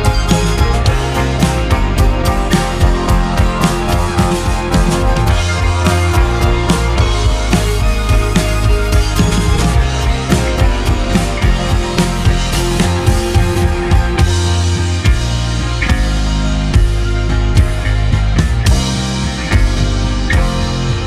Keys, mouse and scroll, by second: 0.5 shift+click, 1.4 x, 2.3 x, 2.8 middle click, 3.6 Tab, 4.0-4.9 middle drag, 4.9-5.4 scroll down 2, 5.4-5.7 middle drag, 5.7-6.3 scroll down 3, 6.3 click, 6.7-9.6 middle drag, 9.6 scroll down 1, 9.9-11.4 middle drag, 11.4-11.9 scroll up 1, 12.7-13.2 scroll up 1, 13.2-15.7 shift+middle drag, 20.5-21.0 shift+right drag.